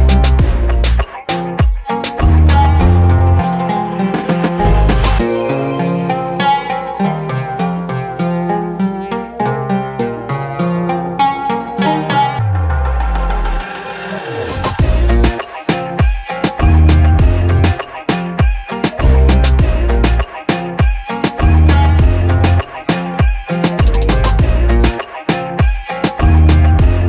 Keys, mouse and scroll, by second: 0.3 click, 1.0 click, 2.2 click, 3.3 alt+click, 3.7-4.0 scroll up 2, 4.1 alt+click, 4.5 middle click, 4.5 alt+scroll down 1, 4.8 middle click, 5.0 alt+click, 5.7 alt+click, 6.8 click, 8.1 click, 9.6-12.7 drag, 13.4 alt+click, 14.1-14.7 scroll up 3, 14.8 alt+click, 15.2-15.7 scroll up 3, 15.9 alt+middle click, 16.3 scroll up 1, 16.6 scroll down 1, 17.1 alt+middle click, 17.4-18.4 scroll down 5, 18.4 alt+click, 19.1 shift+right click, 19.9-20.2 scroll up 6, 20.4 alt+middle click, 20.7 scroll down 2, 21.4 click, 21.9 middle click, 21.9 alt+scroll down 1, 22.1 middle click, 22.4 alt+click, 23.1-25.4 alt+drag, 25.8 alt+middle click, 25.8 alt+scroll down 1, 26.1 alt+click, 26.9-27.0 alt+drag.